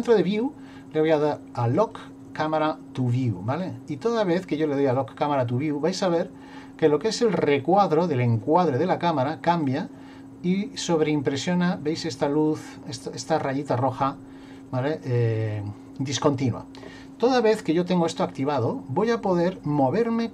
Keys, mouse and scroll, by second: 1.8 click, 3.1 click, 3.5 click, 4.8 click, 9.7 click, 14.5 click, 15.1 click, 18.6 shift+middle click, 19.5 middle click.